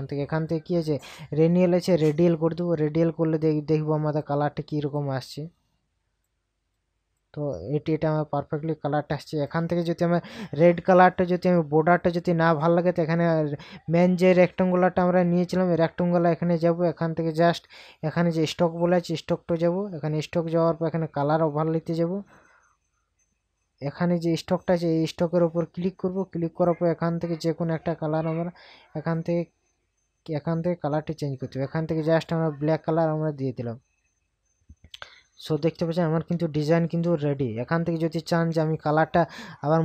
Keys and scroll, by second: 35.7 ctrl+KP_Add, 38.0 ctrl+KP_Subtract.